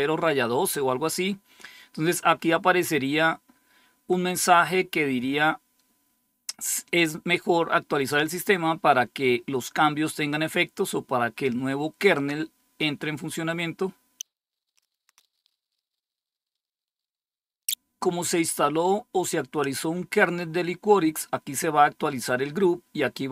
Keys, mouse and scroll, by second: 0.8-5.3 scroll down 2.